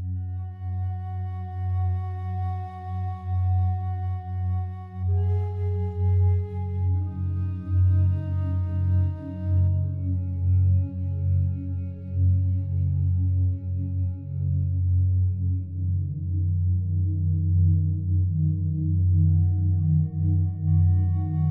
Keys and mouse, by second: 5.8 ctrl+alt+click, 5.8 typing, 6.3 ctrl+alt+shift+click, 6.7 alt+click, 7.9 alt+shift+click, 8.2 alt+click, 12.6 click, 12.9 click, 13.7-14.2 alt+drag, 14.9 click, 15.4 click, 15.9 ctrl+alt+click, 16.3 alt+shift+click, 17.6 click, 18.3 ctrl+alt+click, 19.7 click, 20.1 click, 20.7 alt+click, 21.3 ctrl+alt+click.